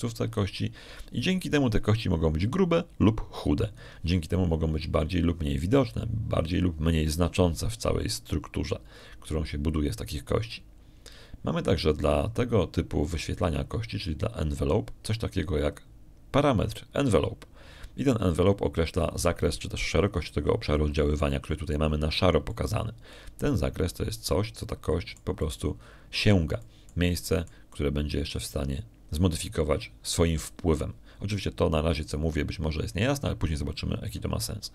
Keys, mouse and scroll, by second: 0.2-5.8 shift+drag, 24.3-27.2 middle drag, 28.5-29.5 middle drag.